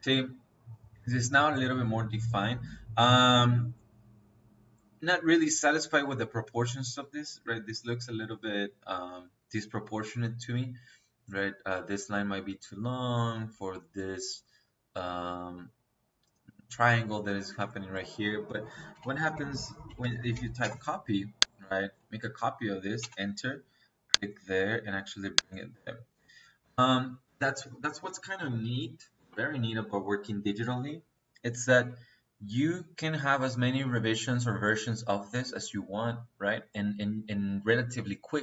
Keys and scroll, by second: 18.4 Escape, 18.8-20.5 typing, 19.2 Escape, 22.9 space, 25.6 Escape.